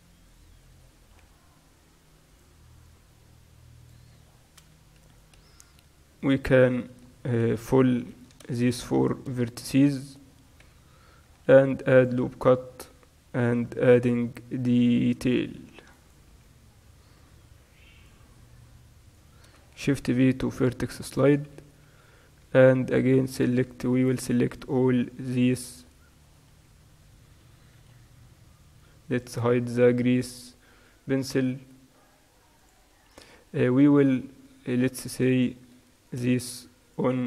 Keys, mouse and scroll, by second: 0.0 click, 0.4 middle click, 1.2 right click, 1.2 g, 2.1 middle click, 2.9-5.0 right drag, 3.1 g, 5.1-11.8 right drag, 7.5 f, 8.4 ctrl+z, 10.7 f, 11.6 ctrl+r, 12.0 click, 12.2 right click, 12.2 z, 12.5 click, 13.5 g, 15.6 ctrl+r, 16.4-18.5 right drag, 17.3 g, 19.2-20.7 right drag, 20.1 shift+v, 20.7 click, 20.8 right click, 21.6 z, 23.0-27.9 right drag, 25.4 z, 25.9 z, 27.9 n, 29.4-34.2 drag, 33.4 n, 34.2-36.1 middle drag, 36.1-37.2 right drag, 36.1 a.